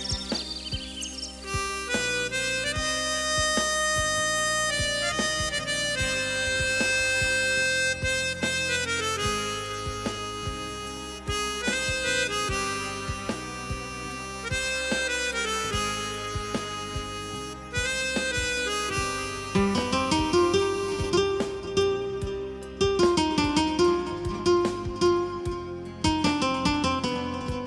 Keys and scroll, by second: 19.3 ctrl+=.